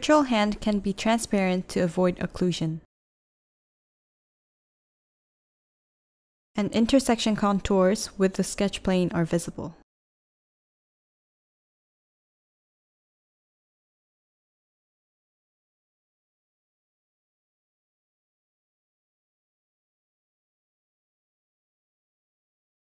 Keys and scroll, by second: 3.4 v, 5.5-7.1 typing.